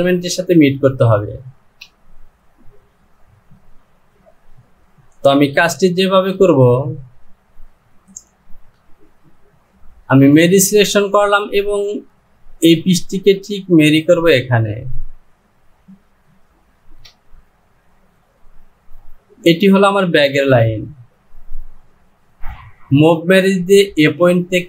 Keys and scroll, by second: 1.7 Return, 5.6 j, 16.8 Return, 22.4 ctrl+z.